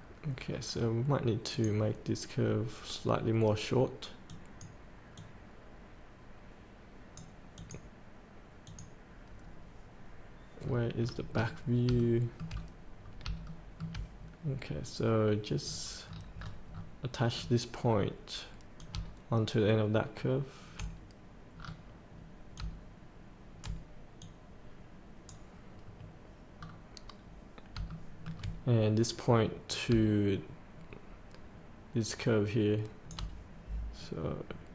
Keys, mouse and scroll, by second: 1.5 click, 2.4 scroll down 1, 3.4 scroll down 1, 4.3 click, 5.3-7.5 drag, 10.6 scroll up 1, 12.0 shift+middle click, 13.0 scroll up 1, 13.5 shift+middle click, 14.6 scroll down 1, 18.8-21.6 drag, 21.7 scroll down 1, 22.6-23.7 drag, 24.9 click, 26.6 scroll up 1, 26.6 scroll down 1, 27.9 shift+middle click, 29.7-33.3 drag, 34.2 scroll down 1.